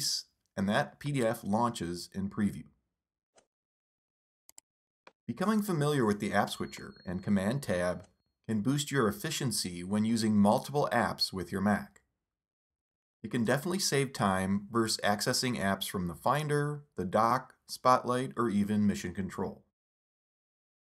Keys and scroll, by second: 0.6 super+Tab, 8.6 super+Right, 10.6 super+Tab, 13.4 super+Tab, 15.2 super+Tab.